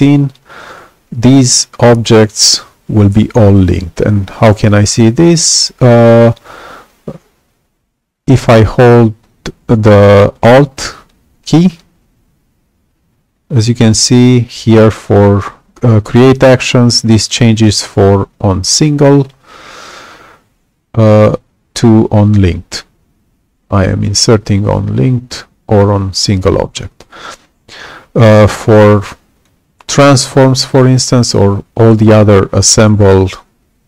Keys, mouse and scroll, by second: 2.6 y, 29.3 click.